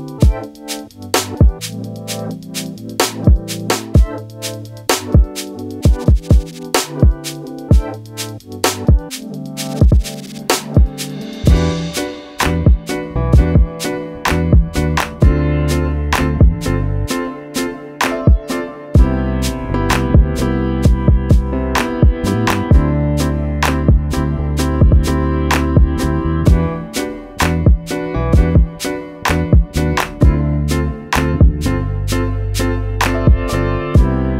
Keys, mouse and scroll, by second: 1.6 click, 2.8 click, 4.2 click, 7.6 click, 11.2 click, 12.3 click, 16.4 click, 20.5 click, 21.8 click, 24.4 click, 25.7 scroll up 1, 26.5 click, 29.9 click, 31.1 click.